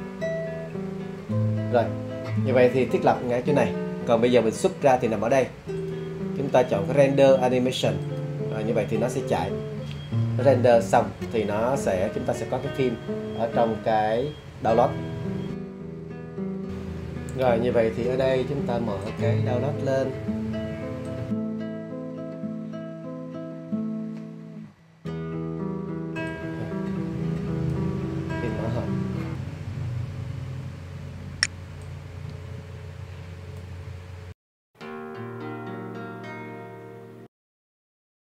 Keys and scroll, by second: 24.7 space.